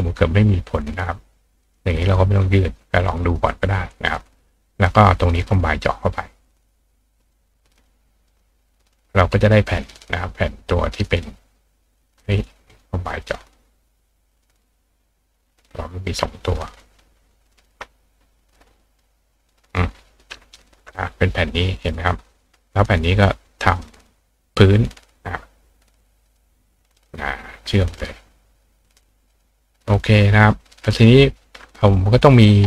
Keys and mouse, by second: 1.6 click, 4.7 click, 5.3 shift+click, 7.2 click, 7.8 click, 8.3 click, 9.4 click, 10.8 click, 12.0 click, 12.7 click, 13.3 click, 14.3 click, 15.7 click, 18.9 click, 19.5 click, 20.2 click, 23.2 click, 26.3 click, 26.9 click, 27.9 click, 28.9 click, 29.3 click.